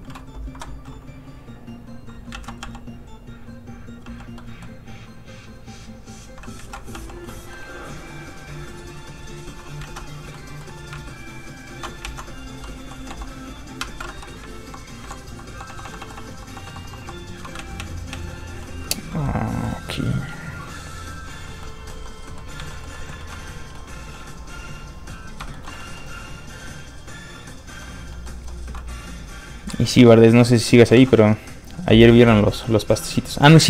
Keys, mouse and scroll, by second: 0.4 Escape, 1.6 click, 2.3 ctrl+z, 2.8 click, 4.0 f, 4.1 click, 4.3 middle click, 5.8 click, 6.6 ctrl+z, 6.9 f, 7.0 click, 7.2 middle click, 9.1 click, 9.8 ctrl+z, 10.1 scroll down 1, 10.3 middle click, 11.0 ctrl+shift+click, 12.0 ctrl+click, 12.1 ctrl+z, 13.0 h, 13.8 ctrl+z, 14.3 shift+z, 14.6 shift+h, 15.0 shift+h, 15.5 shift+h, 17.5 ctrl+z, 18.6 middle click, 18.7 middle click, 20.1 click, 21.6 middle click, 22.7 shift+middle click, 22.9 middle click, 23.2 shift+middle click, 23.7 middle click, 25.4 shift+middle click, 25.6 middle click, 26.6 click, 27.8 middle click, 29.8 middle click, 30.2 click, 30.9 ctrl+z.